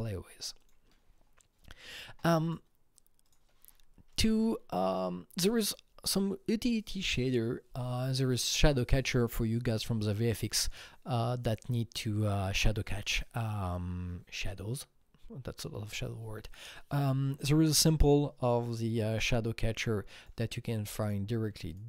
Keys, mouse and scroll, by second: 0.6 KP_Enter, 0.6 click, 3.3 click, 4.1 Right, 17.6 Escape, 17.7 Right, 17.7 click, 19.1 click, 19.2 Right, 20.2 Escape, 20.2 click, 21.0 click, 21.7 click.